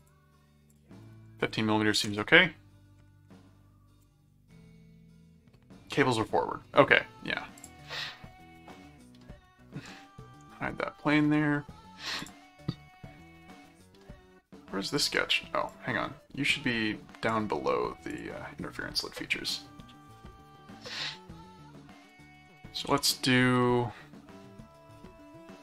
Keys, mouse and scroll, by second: 0.0 click, 0.7 click, 7.6 click, 9.4 middle click, 10.7 right click, 12.2 click, 14.8 click, 15.6-17.3 drag, 18.1 click, 21.7 middle click, 22.1 click, 22.2-23.6 typing.